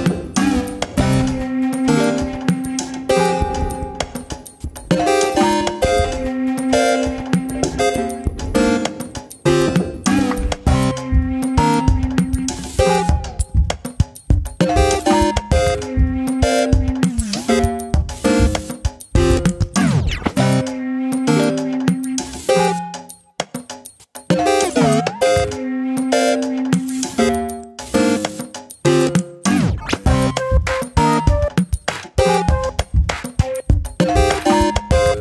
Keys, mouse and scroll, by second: 0.1 s, 1.3 middle click, 2.1 2, 2.8 click, 3.2 alt+click, 4.3 alt+shift+click, 5.6 ctrl+b, 10.5 s, 13.1-14.0 scroll down 1, 14.0 2, 14.5 alt+click, 15.7 alt+shift+click, 16.5 alt+shift+click, 16.9 middle click, 17.7 alt+shift+click, 18.0 middle click, 18.5-19.3 scroll up 1, 19.3 ctrl+b, 21.8 scroll down 2, 22.0-23.0 middle drag, 23.0 click, 23.3-26.2 middle drag, 26.2 a, 26.5 middle click, 26.9 s, 28.0 middle click, 28.2 Tab, 28.4 middle click, 29.0 click, 29.7 Tab, 29.8-31.8 middle drag, 31.8 alt+click, 32.2 middle click, 32.7 alt+click, 33.1-33.7 scroll up 1, 33.7 g.